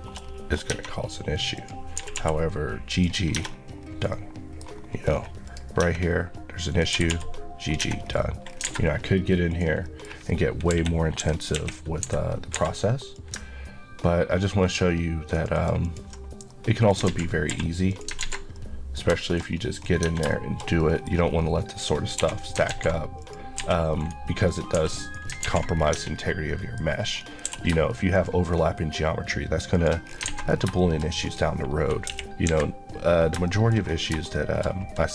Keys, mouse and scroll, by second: 0.0 shift+middle click, 0.3 scroll up 1, 0.7 Tab, 1.6 click, 2.0 typing, 2.9 click, 3.4 scroll, 3.4 scroll down 1, 4.1 middle click, 4.8 scroll up 1, 5.5 click, 5.8 Tab, 6.1 scroll up 1, 6.7 click, 7.0 typing, 7.7 click, 7.8 Tab, 8.1 scroll down 1, 8.6-9.5 alt+scroll down 2, 8.7 alt+a, 9.5 click, 9.9 middle click, 10.7 KP_3, 11.6 KP_1, 12.6 Escape, 13.2 click, 16.5 middle click, 17.1 alt+z, 17.9 click, 18.2 alt+z, 18.6 middle click, 19.5 scroll up 1, 20.0 Tab, 20.3 shift+middle click, 20.9 KP_Decimal, 21.1 scroll up 1, 22.2 1, 22.7 alt+z, 23.2 click, 23.6 g, 24.0 right click, 24.5 click, 25.1 right click, 25.5 alt+z, 25.8 scroll down 1, 26.5 middle click, 26.9 scroll up 1, 27.5 q, 28.2 click, 30.0 click, 30.1-30.8 scroll down 3, 30.3 alt+a, 30.8 shift+middle click, 31.3 click, 32.1 KP_1, 32.5 KP_3, 33.2 scroll down 2, 33.5 shift+middle click, 34.3 shift+middle click, 34.7-35.1 shift+scroll up 2.